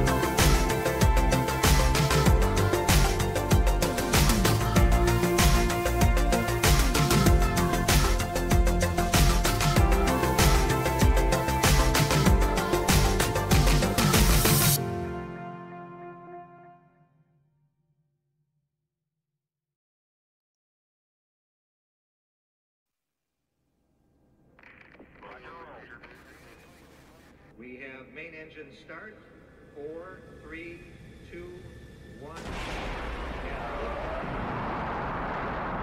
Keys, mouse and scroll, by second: 5.0-6.6 drag, 8.2-13.9 typing, 15.0 Down, 15.8 Return, 20.4-22.1 drag, 30.5-31.6 right drag, 32.5 click, 35.6 click.